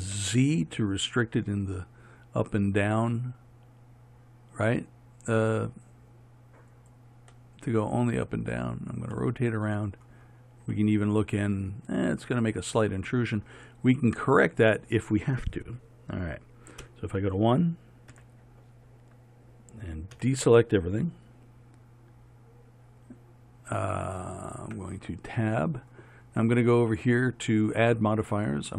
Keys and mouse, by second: 16.9 KP_1, 18.2 z, 20.2 a, 24.7 Tab, 28.2-28.7 drag.